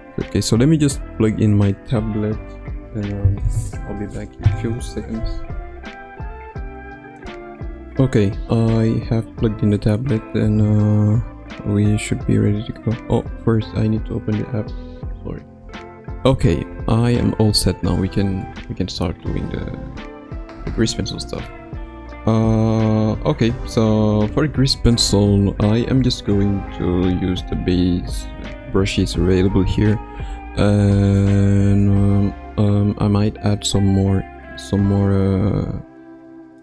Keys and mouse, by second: 21.3 ctrl+alt+middle click, 22.9 click, 23.8 ctrl+alt+middle click, 26.8-28.2 drag.